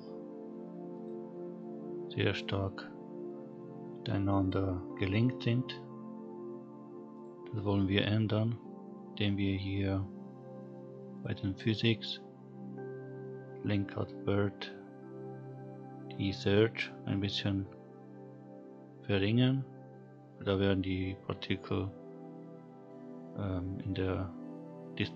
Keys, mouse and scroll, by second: 0.9 click, 4.4 click, 7.1 click, 11.1 click, 14.0 scroll down 1.